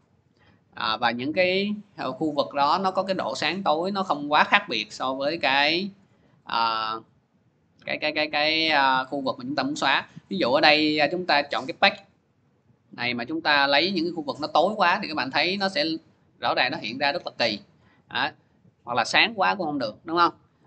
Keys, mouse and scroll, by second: 2.0 scroll down 1, 5.3-8.2 scroll down 1, 8.2-8.6 scroll down 1, 8.6 scroll, 8.7 click, 9.4 scroll, 10.5 click, 11.2 click, 12.2 click, 14.5 click, 14.8 scroll, 15.5 scroll, 16.4 scroll, 17.4 scroll, 19.0 click, 19.2 scroll, 20.1 scroll.